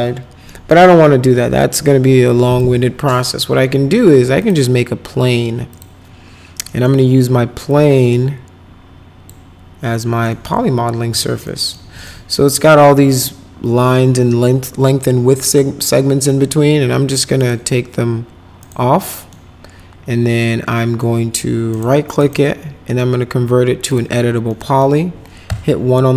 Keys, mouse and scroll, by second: 0.5 right click, 1.3 Delete, 1.8 click, 2.5 click, 4.4 click, 5.7 click, 6.7 middle click, 7.7-9.2 drag, 9.9 middle click, 10.3 middle click, 11.1 F4, 11.4 middle click, 11.9 middle click, 12.3 middle click, 17.4 right click, 18.6 right click, 19.0 middle click, 20.7 middle click, 21.7 right click, 22.1 right click, 23.9 click, 24.5 middle click, 25.5 1.